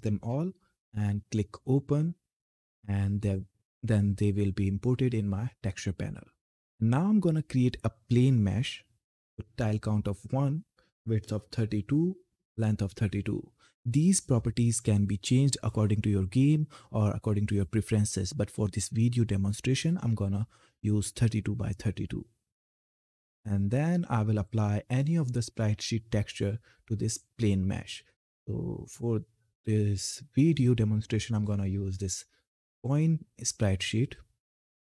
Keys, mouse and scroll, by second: 1.4 click, 3.6-7.1 drag, 7.7 click, 10.2-14.8 drag, 22.4-26.4 drag, 26.4-26.9 scroll up 1, 27.0-28.4 scroll down 1, 31.1 click, 34.7 Left.